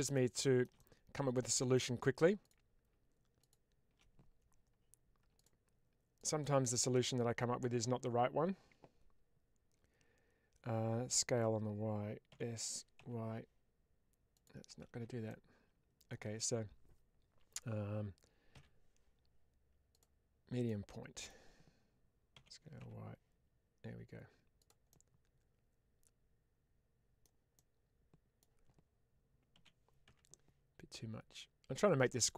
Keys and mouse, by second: 0.7 middle click, 2.3 click, 3.3 shift+click, 12.2 s, 12.9 y, 14.2 click, 14.7 ctrl+z, 15.2 middle click, 20.5 middle click, 22.2 s, 22.7 y, 24.5 click, 24.8-27.1 middle drag, 27.4 middle click, 29.4 s, 29.9 y, 32.1 click.